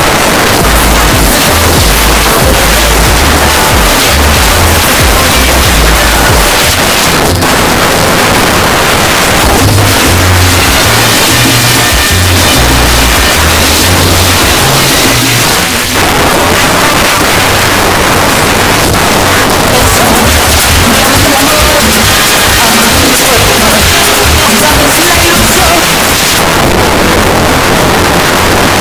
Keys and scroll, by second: 6.7 Page_Down, 15.4 Page_Down, 25.8 Page_Down.